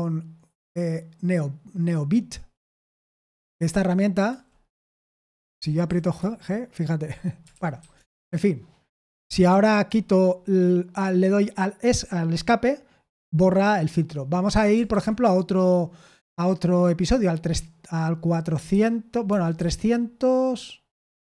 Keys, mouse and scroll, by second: 2.5 Return, 3.6-4.2 typing, 5.8 shift+g, 7.5-8.2 typing, 9.8 Escape, 14.8 shift+/, 18.6 4, 19.5 2, 20.9 BackSpace, 21.0 BackSpace.